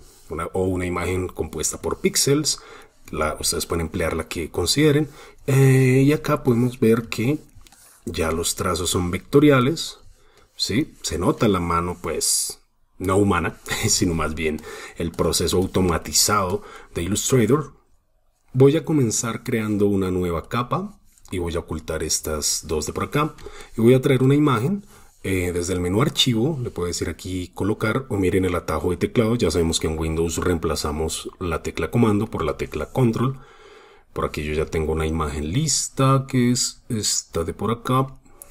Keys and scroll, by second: 0.2 super+space, 1.8 super+space, 2.0 super+space, 2.6 super+space, 3.4 super+space, 3.7 super+space, 5.0 super+space, 7.1 super+space, 9.4 super+space, 13.9 super+space, 17.0 super+space, 17.5 super+space.